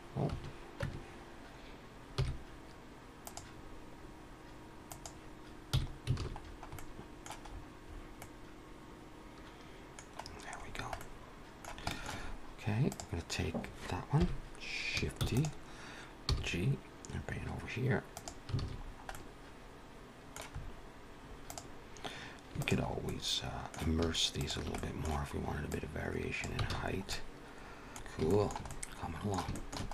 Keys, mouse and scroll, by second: 6.2 alt+a, 6.2-6.6 scroll down 4, 6.2 n, 6.6 middle click, 7.4-8.0 scroll up 6, 8.1 middle click, 10.1-10.9 scroll down 8, 10.9 middle click, 11.8 shift+middle click, 12.1 scroll up 2, 12.8 click, 14.1 KP_1, 15.1 shift+d, 16.1 g, 18.5 alt+a, 18.6-19.0 scroll down 4, 19.0 middle click, 20.5-21.2 scroll up 4, 21.2 click, 22.5 shift+click, 22.9 middle click, 24.3 shift+click, 24.6 middle click, 25.6 click, 26.6 alt+a, 26.7-27.3 scroll down 4, 27.0 middle click, 27.9 ctrl+s, 27.9 middle click, 27.9 scroll down 2, 28.1 shift+middle click, 28.5 middle click, 29.3 shift+middle click, 29.7 scroll up 3.